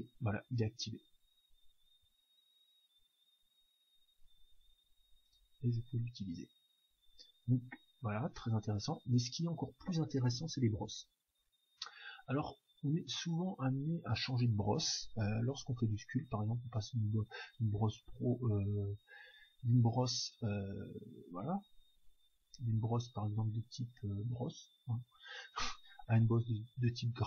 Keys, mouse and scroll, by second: 0.5-2.4 drag, 8.7-11.8 middle drag, 11.8-13.7 drag, 15.8-17.7 drag, 18.5-19.7 middle drag, 19.7-25.1 drag, 26.5 middle click, 27.1-27.2 drag.